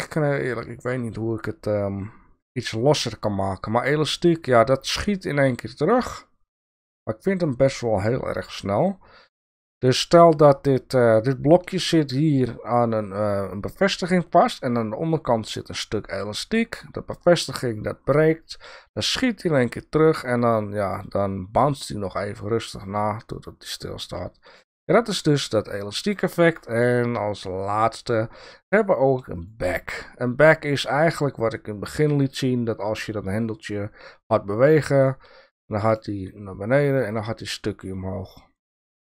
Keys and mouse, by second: 2.4 click, 3.4-9.4 drag, 10.9 click, 18.4-24.6 drag, 25.7 click, 26.4-29.5 drag.